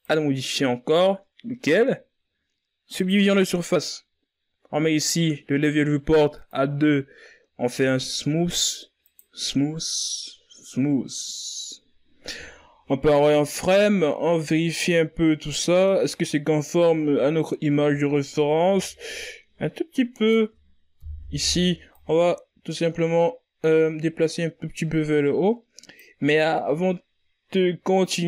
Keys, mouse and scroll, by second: 0.0-1.0 drag, 1.9-5.7 drag, 9.1-10.5 drag, 10.5 w, 14.6-15.1 scroll up 3, 15.1 z, 16.8-19.9 scroll up 2, 20.6 z, 21.4 Tab, 22.9 right click, 23.7 o, 24.6-27.8 drag.